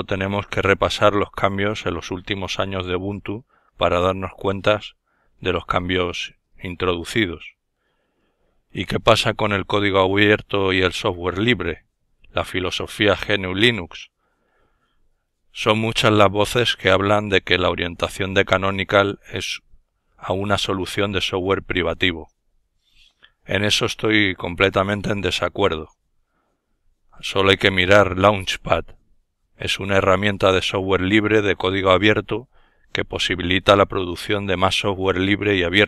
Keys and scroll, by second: 6.7 super+s, 9.8 ctrl+alt+Left, 12.1 ctrl+alt+Left, 14.1 ctrl+alt+Left, 15.5 Left, 31.3 ctrl+super+d.